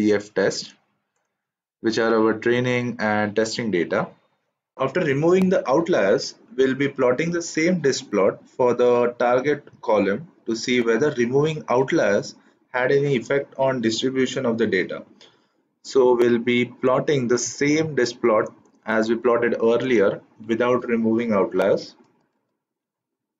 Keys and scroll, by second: 22.3 shift+Return.